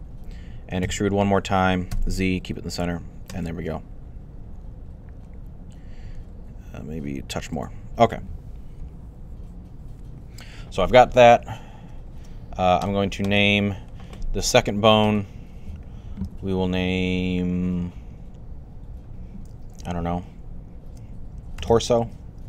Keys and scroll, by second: 0.5-1.8 typing, 5.9 typing, 21.1-22.4 typing.